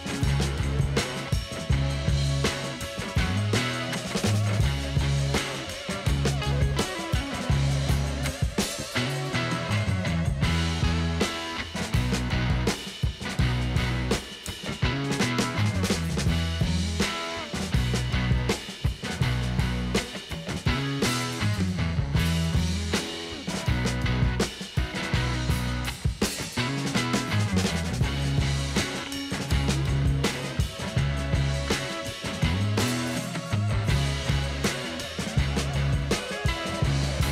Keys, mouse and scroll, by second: 0.0 click, 2.4 click, 4.4 click, 4.8 click, 6.0 click, 6.9 click, 10.6 click, 10.7 click, 12.2 click, 13.8 click, 14.4 click, 16.2 click, 18.1 click, 18.6 click, 21.1 click, 23.0 click, 23.3 click, 26.2 click, 27.1 click, 29.6 click.